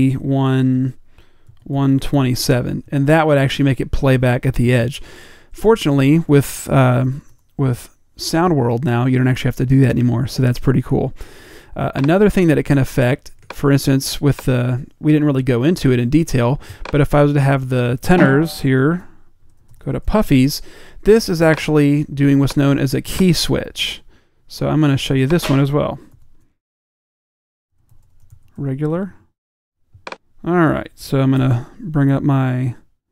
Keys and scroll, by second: 0.0-2.7 typing, 19.2-21.4 typing, 27.3-29.4 typing, 31.5 typing.